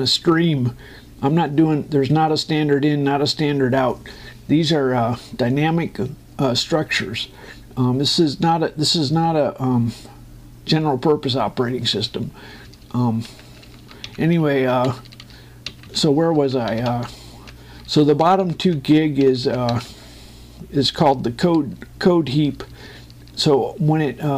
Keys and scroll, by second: 21.0 Down.